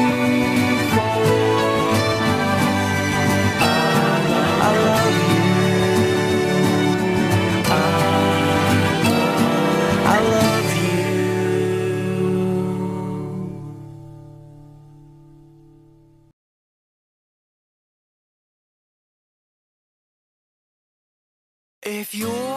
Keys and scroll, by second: 2.6 ctrl+z, 3.3 ctrl+z, 3.6 ctrl+z, 14.9 ctrl+z.